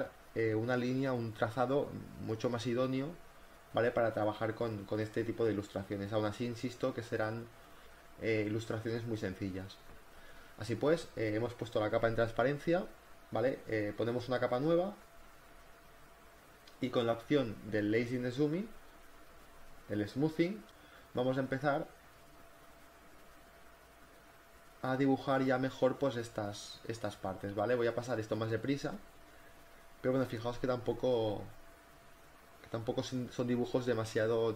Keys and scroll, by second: 26.6 ctrl+z, 27.1 ctrl+alt+z, 28.6 ctrl+z, 29.3 ctrl+z, 29.8-33.2 typing.